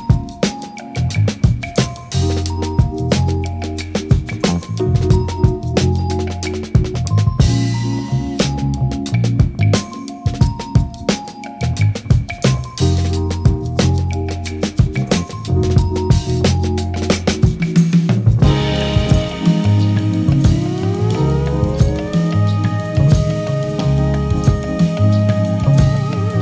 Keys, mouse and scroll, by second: 0.0 middle click, 0.0 click, 0.2 middle click, 0.6 click, 0.9 ctrl+middle click, 1.1 click, 1.3 click, 1.4 click, 1.5 click, 2.3 shift+middle click, 2.6 middle click, 2.7 click, 2.8 f, 2.8 click, 2.9 middle click, 3.2 click, 3.7 click, 4.3 ctrl+z, 4.9 click, 5.0 click, 5.1 ctrl+z, 5.2 click, 5.3 ctrl+middle click, 5.7 middle click, 5.9 click, 6.5 click, 6.8 click, 6.9 f, 6.9 click, 7.2 middle click, 7.2 click, 7.5 click, 7.7 click, 7.9 middle click, 7.9 click, 8.2 click, 8.6 click, 8.7 middle click, 8.7 click, 8.8 shift+middle click, 8.9 click, 9.1 f, 9.2 ctrl+middle click, 9.5 click, 9.9 middle click, 10.0 ctrl+z, 10.0 click, 10.1 middle click, 10.2 click, 10.4 click, 10.5 f, 10.6 click, 10.7 click, 10.9 middle click, 11.0 middle click, 11.1 click, 11.3 middle click, 11.3 click, 11.5 ctrl+middle click, 11.6 click, 11.8 middle click, 11.8 click, 12.0 click, 12.0 middle click, 12.3 middle click, 12.4 click, 12.5 shift+middle click, 12.7 middle click, 12.9 click, 13.1 middle click, 13.2-15.4 typing, 13.3 click, 13.6 ctrl+middle click, 13.9 click, 14.3 shift+middle click, 14.5 click, 14.9 middle click, 15.0 right click, 15.1 ctrl+middle click, 15.2 click, 15.3 right click, 15.4 middle click, 15.6 ctrl+middle click, 15.7 ctrl+middle click, 15.8 shift+middle click, 15.9 middle click, 16.0 click, 16.2 ctrl+middle click, 16.3 Return, 16.4 click, 16.5 right click, 16.9-20.5 typing, 16.9 Escape, 17.1 click, 17.2 middle click, 17.7 Return, 17.8 right click, 17.8 click, 18.0 Return, 18.1 right click, 18.5 Return, 18.6 right click, 18.7 right click, 19.0 right click, 19.1 right click, 19.2 click, 19.4 Return, 19.5 click, 19.5 Return, 19.9 ctrl+middle click, 20.4 click, 20.5 click, 20.9 ctrl+alt+Page_Up, 21.0 ctrl+shift+middle click, 21.2 click, 22.3 middle click, 22.4 click, 22.5 middle click, 22.6 click, 22.7 middle click, 22.8 click, 22.8-24.5 typing, 22.9 middle click, 23.1 middle click, 23.2 click, 23.3 middle click, 23.5 click, 23.7 shift+middle click, 23.8 ctrl+middle click, 23.9 F6, 24.1 click, 24.2 click, 24.4 click, 25.1 shift+click, 25.2 Return, 25.4 right click, 25.4 click, 25.8 ctrl+middle click, 26.0 middle click, 26.0 right click, 26.1 shift+middle click.